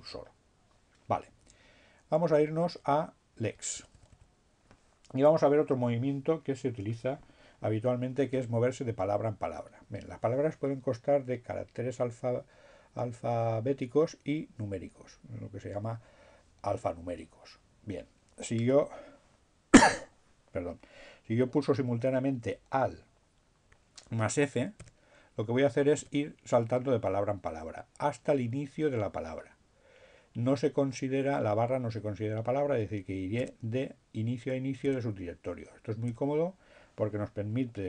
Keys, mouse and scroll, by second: 2.1 BackSpace, 23.3 alt+f, 25.4 f, 32.2 f, 32.8 f, 36.1 f.